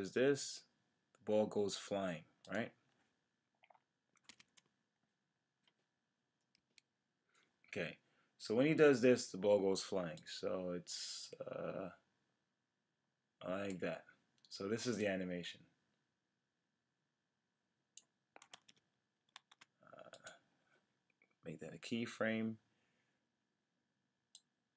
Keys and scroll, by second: 4.3 shift+F5, 18.5 super+z, 21.8 F6.